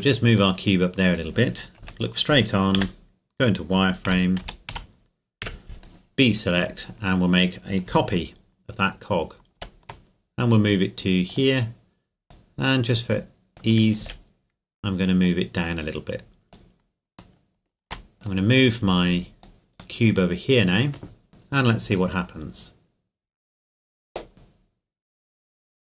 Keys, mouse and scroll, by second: 0.1 click, 1.1-1.8 scroll up 1, 1.8 KP_1, 2.8 z, 4.1 a, 4.4 a, 4.7 a, 5.4 b, 5.8 click, 7.1-7.9 scroll down 2, 9.6 shift+d, 11.3-12.6 drag, 14.0 z, 15.2 click, 17.4 middle click, 17.9 a, 18.1 right click, 18.3 click, 20.0 middle click, 21.3 click.